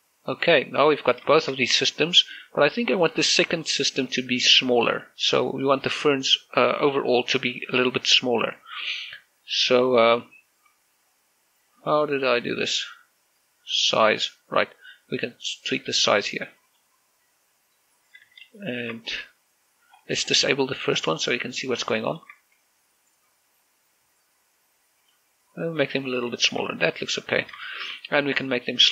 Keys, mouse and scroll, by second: 0.6 scroll down 1, 1.6 click, 1.9 scroll down 1, 2.0 shift+middle click, 2.7 scroll up 1, 4.4 middle click, 6.0-6.4 scroll up 1, 8.1-10.2 scroll down 1, 12.8-13.6 scroll up 1, 17.4 click, 18.8 scroll up 1, 19.0 z, 19.4 shift+middle click, 20.7 scroll up 1, 22.3 click, 22.8 shift+middle click, 24.4 scroll down 1, 25.8 click, 26.9 scroll down 1, 27.4 shift+middle click, 27.4 scroll up 1, 27.6 z, 27.8 middle click.